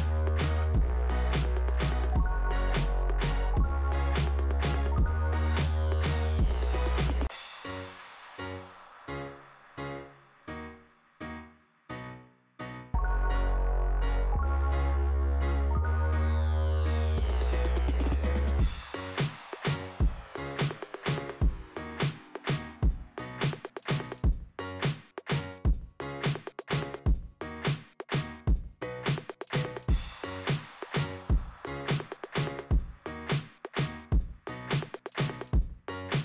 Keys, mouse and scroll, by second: 1.7 click, 7.4 click, 7.5 click, 7.7 click, 7.9 right click, 8.0 double right click, 8.5 m, 9.8 click, 10.0 m, 13.3 scroll down 2, 14.9 middle click, 16.8 click, 18.8 click, 20.7 click, 23.7 scroll up 2, 25.3-26.0 scroll up 1, 26.0 scroll up 1, 26.8 click, 28.4 click, 30.7 click, 33.8 click, 35.2 click.